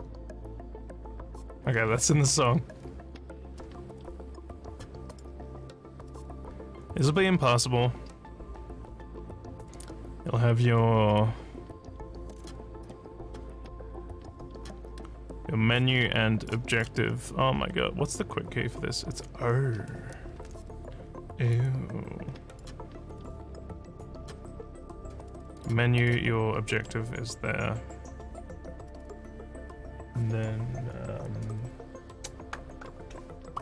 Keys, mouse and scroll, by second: 4.6 click, 5.1 click, 11.2-12.4 drag, 12.8 click, 13.8 click, 15.7 click, 16.7 click, 21.5-22.6 drag, 23.2 click, 25.5 click, 26.0 click.